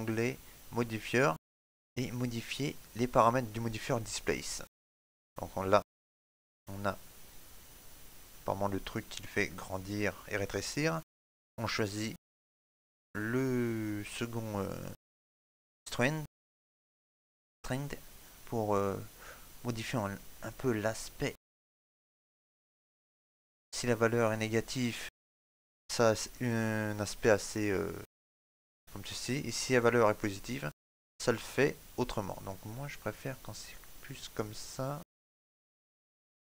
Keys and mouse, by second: 0.5-6.8 click, 27.2 middle click, 29.6 click.